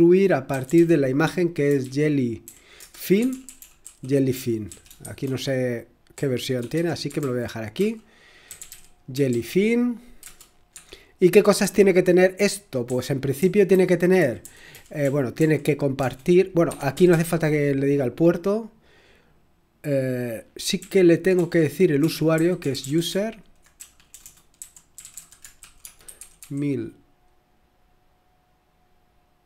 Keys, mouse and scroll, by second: 0.0-12.1 typing, 13.1-17.1 typing, 20.8-26.9 typing.